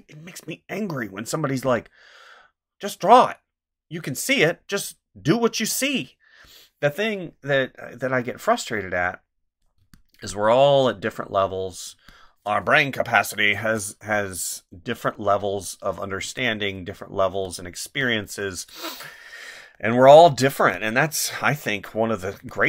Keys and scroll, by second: 9.8 space, 11.9 space, 16.2 space, 17.8 space, 20.6 space, 22.4 space.